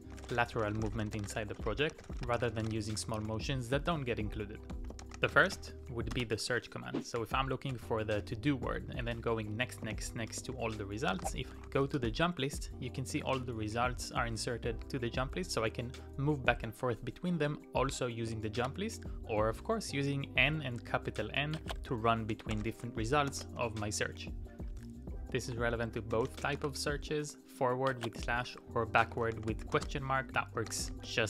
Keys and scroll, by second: 0.0-6.1 typing, 6.2 Return, 7.2 n, 7.7 n, 8.2 n, 9.9 shift+;, 10.6 shift+j, 11.3 shift+t, 11.7 Up, 12.0 Return, 13.2 Up, 13.4 Up, 13.7 Up, 18.6 ctrl+c, 22.1-23.3 typing, 24.7-26.8 typing, 28.6-31.2 typing.